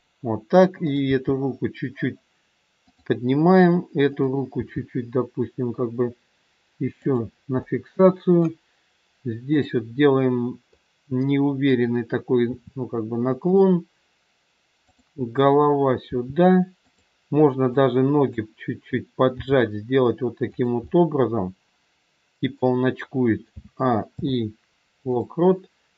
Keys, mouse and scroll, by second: 0.8 click, 1.6 g, 4.1 click, 5.0 g, 7.6 middle click, 9.4 click, 10.7 middle click, 12.3 r, 14.7 click, 16.0 r, 17.8 click, 19.4 g, 20.8 middle click, 20.8 scroll up 1, 23.5 a, 24.0 i.